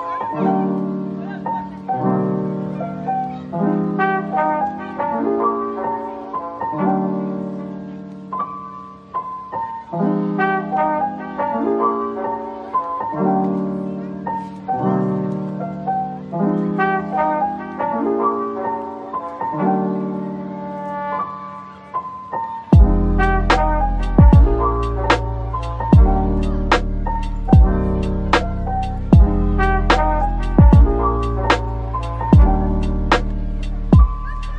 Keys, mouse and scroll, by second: 0.3 g, 1.1 middle click, 1.8 g, 2.9 double click, 3.2 g, 3.7 click, 4.1 g, 5.0 double click, 5.2 g, 5.9 middle click, 6.4 Tab, 6.8 right click, 7.6 middle click, 9.1 Tab, 10.3 g, 10.9 scroll down 1, 11.2-12.0 scroll, 12.1 Tab, 12.5 middle click, 13.0 Tab, 14.2 g, 14.9 Tab, 15.1 middle click, 16.0 s, 16.9-17.2 scroll up 1, 17.4 middle click, 17.8 s, 19.4-20.2 scroll down 1, 20.2 typing, 23.0 typing, 23.8-24.6 scroll up 1, 24.4-25.7 typing, 27.1-29.3 typing, 30.4 right click, 30.6-33.7 typing.